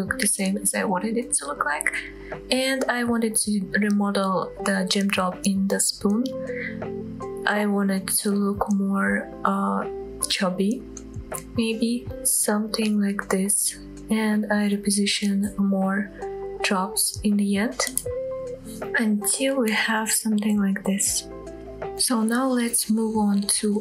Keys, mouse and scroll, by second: 0.4 click, 0.5 middle click, 1.1 scroll up 1, 1.2 g, 1.5 z, 1.8 click, 2.4 g, 2.6 z, 2.9-3.7 scroll up 4, 4.3 click, 4.5 middle click, 4.8 click, 5.2 g, 5.4 z, 5.9 click, 6.4 g, 6.5 z, 7.4 click, 7.6 Tab, 7.7 click, 8.0-8.4 scroll up 2, 8.4-8.9 scroll down 1, 8.9 middle click, 9.3 shift+middle click, 9.4 click, 9.5 Tab, 9.7 middle click, 9.9 scroll up 1, 9.9 middle click, 10.4 g, 10.6 z, 10.9-11.3 scroll down 2, 12.0 Tab, 12.3 click, 12.4 scroll down 2, 12.6 middle click, 13.2 scroll down 1, 13.4 middle click, 14.3-14.6 scroll down 2, 14.5 shift+middle click, 14.8 click, 15.1-15.9 shift+middle drag, 15.9 KP_7, 16.2 shift+middle drag, 16.5 g, 17.8 click, 18.1 scroll down 1, 18.3-18.7 middle drag, 18.8-19.1 scroll up 3, 19.0 middle click, 19.2 shift+middle drag, 19.4 middle click, 19.6 scroll down 1, 19.8-20.5 middle drag, 20.5-21.1 drag, 21.1 scroll down 2, 21.5 middle click, 22.0-22.4 scroll up 2, 22.4-23.0 middle drag.